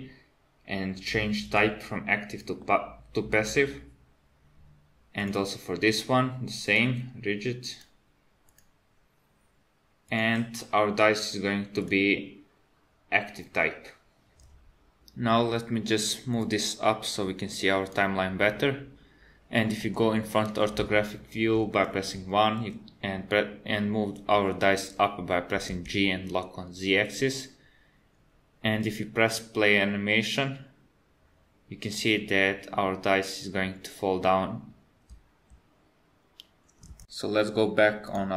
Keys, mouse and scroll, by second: 1.5 click, 5.3 click, 6.7 click, 7.8 click, 10.2 click, 11.9 click, 16.4 click, 19.9 KP_1, 25.5 g, 29.3 click, 35.2 space, 38.1 click.